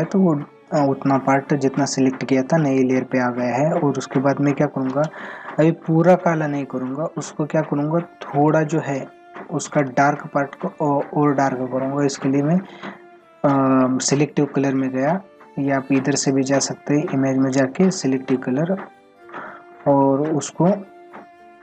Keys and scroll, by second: 0.9 ctrl+=.